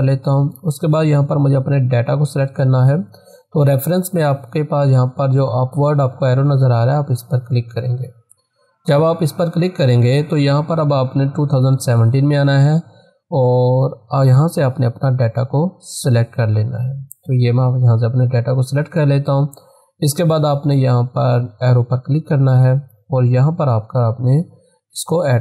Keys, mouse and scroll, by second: 0.1 click, 7.7 click, 10.8 click, 15.3-20.1 drag, 22.0 click, 25.0 click.